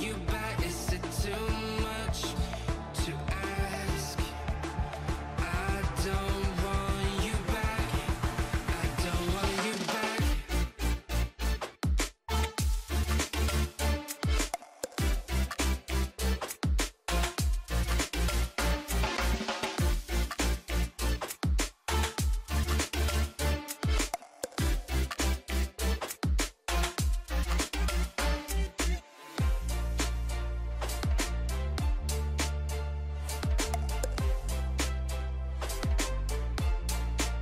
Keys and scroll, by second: 33.7 i.